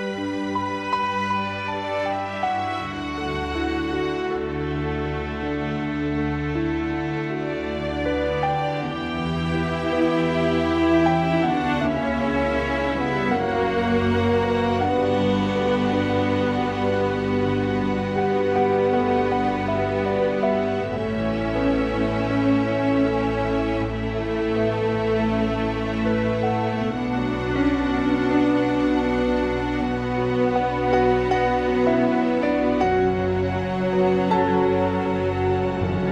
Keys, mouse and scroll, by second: 2.3 click, 8.6 g, 10.8 click, 11.4 g, 13.1 click, 14.2 g, 16.9 click, 19.6 click, 21.8 s, 23.6 click, 24.7 s, 25.4 click, 26.0 s, 27.9 click, 28.6 r, 30.9 r, 34.4 click.